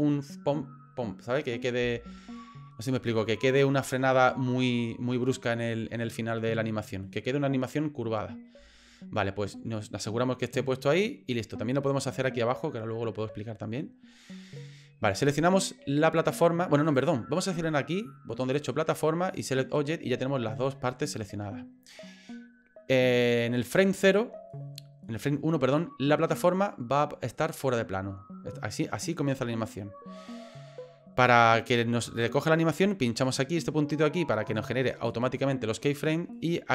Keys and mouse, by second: 15.2 right click, 16.8 right click, 18.5 right click, 26.3-29.1 drag, 32.2 click, 34.9 click.